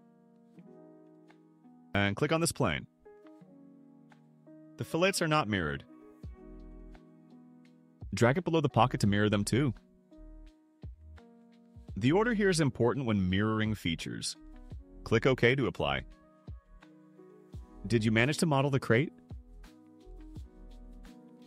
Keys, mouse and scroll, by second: 1.3 click, 6.9-8.9 drag, 15.7 click, 17.5 click, 17.7-20.8 drag.